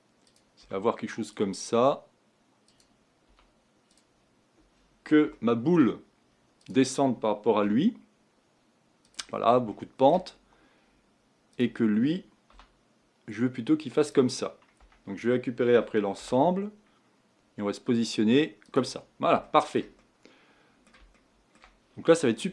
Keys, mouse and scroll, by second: 0.2 click, 0.6 g, 2.7 click, 3.2 g, 5.3-6.6 shift+middle drag, 6.6 click, 7.6 g, 9.7 shift+middle click, 10.3 scroll up 2, 11.5-12.5 drag, 12.5 g, 14.8 Tab, 15.7 g, 19.0-19.4 scroll down 4, 19.4-22.5 shift+middle drag.